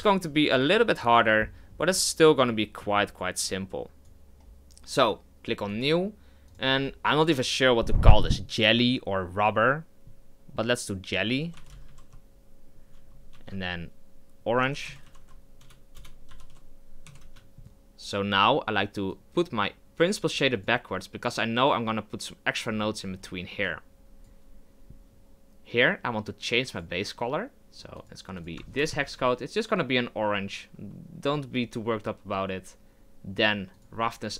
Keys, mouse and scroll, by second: 5.8-17.2 drag, 17.2 BackSpace, 19.1 click, 29.0 click.